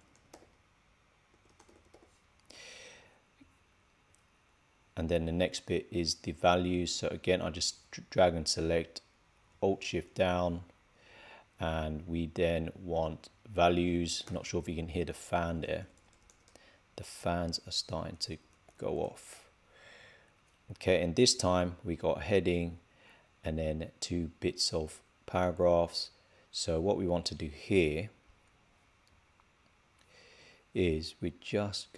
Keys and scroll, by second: 0.2 shift+h.